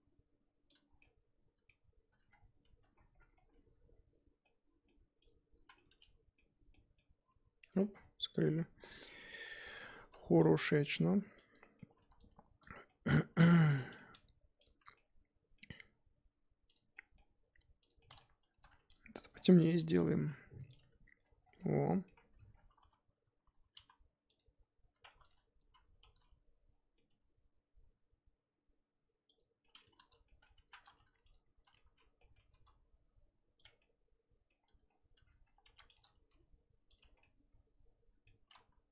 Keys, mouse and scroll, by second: 0.0 s, 1.0-2.1 middle drag, 2.1 Tab, 2.3-2.8 scroll down 1, 2.8 Tab, 3.0-3.9 scroll up 7, 3.9 z, 4.4-5.2 middle drag, 5.2 click, 5.6 z, 5.7-6.7 middle drag, 6.7 scroll up 1, 6.7-7.2 middle drag, 7.2 g, 7.8 Tab, 8.0 scroll down 2, 8.4 click, 8.5-9.1 scroll down 7, 9.2 middle drag, 9.4-10.0 scroll up 11, 9.6 Tab, 10.0 3, 10.6 click, 11.3 click, 11.6 middle drag, 11.9 g, 12.8 click, 12.9 middle click, 13.5 2, 13.7 click, 13.8 middle click, 14.1 g, 15.0-16.7 middle drag, 16.7 click, 16.9 middle click, 17.3 g, 18.0-18.5 middle drag, 18.5 3, 18.9 alt+Left, 20.0 click, 20.2 g, 20.8 Tab, 21.2-21.6 scroll down 7, 21.6-22.1 middle drag, 22.1-22.8 scroll up 10, 22.3 Tab, 22.8 2, 24.4 click, 25.1 1, 25.3 click, 25.7 z, 26.0-27.1 middle drag, 27.1 g, 29.6-30.0 middle drag, 30.0 ctrl+z, 30.2-30.6 middle drag, 30.6 z, 31.3 click, 31.6 z, 31.7-32.5 middle drag, 32.5 g, 33.8 middle click, 34.6 Tab, 34.8-35.1 scroll down 1, 35.1 Tab, 35.2-35.6 scroll up 7, 35.6 1, 35.9 click, 36.3 g, 37.2 scroll down 1, 37.2-38.6 middle drag, 38.6 z.